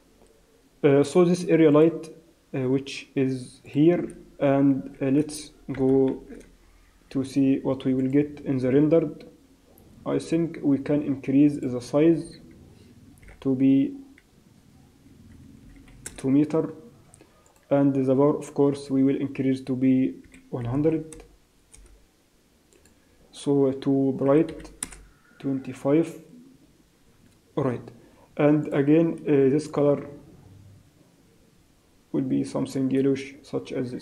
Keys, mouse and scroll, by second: 1.7 click, 3.6 click, 5.8 KP_0, 6.1 shift+z, 8.3 click, 12.6 click, 17.9 click, 21.7 0, 25.0 click.